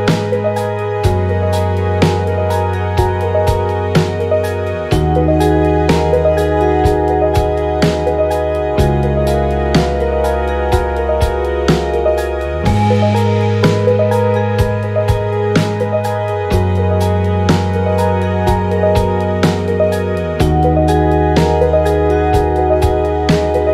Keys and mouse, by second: 3.1 click, 4.5 click, 6.0 click, 7.1 click, 12.7 click, 13.3 space, 14.5 space, 22.1 click, 23.2 click.